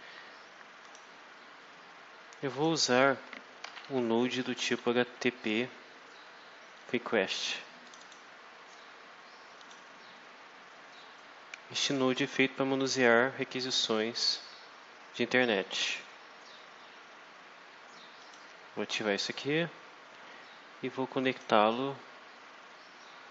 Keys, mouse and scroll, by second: 0.7 click, 2.4 click, 3.3-5.0 typing, 7.2 click, 7.8 click, 9.5 click, 18.1 click, 21.2 click.